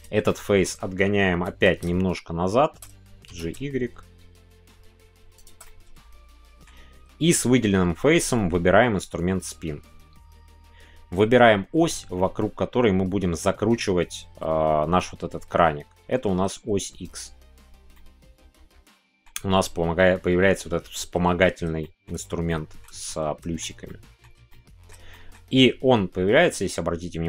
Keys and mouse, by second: 0.3 middle click, 3.5 shift+y, 5.3 click, 5.6-6.6 middle drag, 17.9-19.2 middle drag, 21.8 shift+middle click, 22.4 shift+middle click, 23.0 middle click, 23.8 shift+middle click, 24.5 middle click, 25.1 shift+middle click.